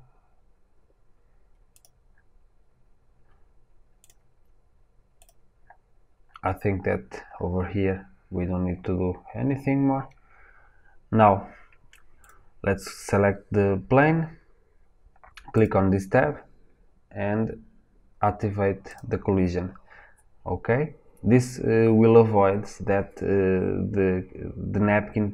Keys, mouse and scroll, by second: 18.9-25.3 drag.